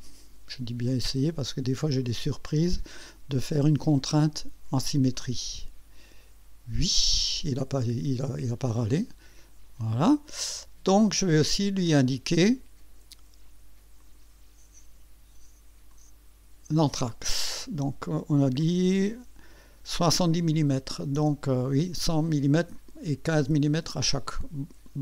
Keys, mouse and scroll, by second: 2.0 click, 2.2 click, 5.1 click, 8.9-10.5 drag, 12.0 click, 12.6 click, 14.0 click, 15.9 click, 17.8 KP_1, 18.8 BackSpace, 20.0 KP_7, 21.1 KP_0, 21.9 KP_0, 22.7 click.